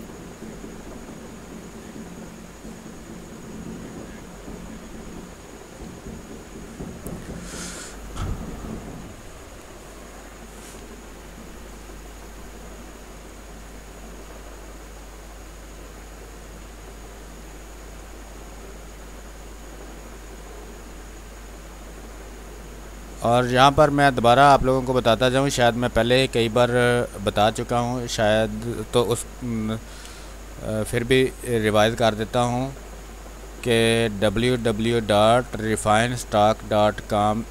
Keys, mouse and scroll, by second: 3.4 space, 5.4 click, 6.3 space, 6.5 click, 6.8 space, 13.1 click, 13.2 space, 15.4-24.2 drag, 24.2-27.0 drag, 27.0 space, 27.4 click, 27.5 space, 28.9 r, 29.1 click, 29.7 b, 30.0 space, 30.2 click, 30.5 space, 31.4 click, 33.4 ctrl+z, 35.4 x, 35.7 click, 37.4 x.